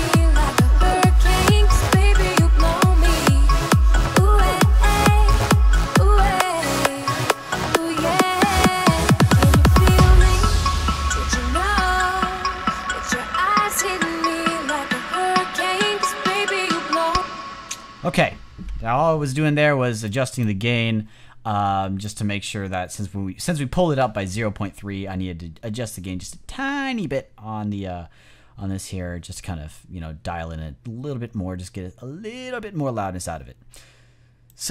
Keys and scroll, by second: 16.9 space.